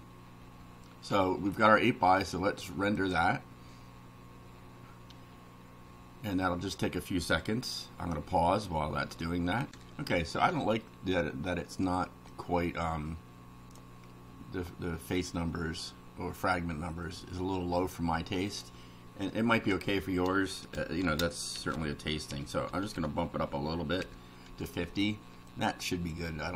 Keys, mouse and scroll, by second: 3.0 click, 9.7 ctrl+r, 11.5 middle click, 12.3-13.9 drag, 18.5 click, 19.6 Return, 19.8 Up, 21.0-24.0 typing, 24.5 F5, 25.5 click.